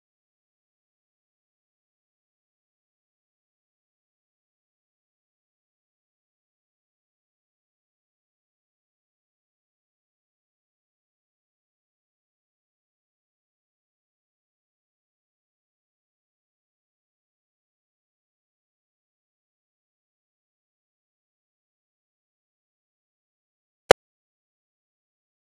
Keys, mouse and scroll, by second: 0.0-1.0 drag, 3.3 middle click, 3.5 KP_0, 4.0-7.7 drag, 7.7 r, 8.2 z, 9.0 click, 10.7 middle click, 10.7 scroll down 14, 11.0 Tab, 11.4-13.0 typing, 14.1 Tab, 14.2-16.7 typing, 14.5 Tab, 17.6 middle click, 17.7-18.1 scroll down 14, 17.9 middle click, 18.1 shift+middle click, 18.2-22.1 typing, 19.2 Tab, 19.9 scroll down 1, 23.1 Tab, 23.2 Tab, 23.6 z, 24.8 z, 25.0 middle drag, 25.0-25.5 scroll down 5.